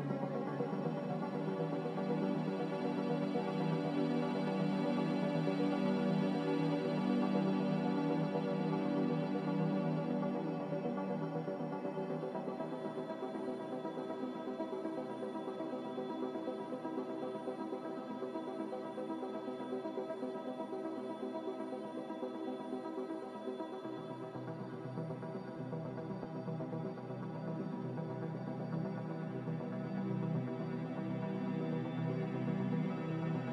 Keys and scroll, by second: 26.9 g, 28.6 z.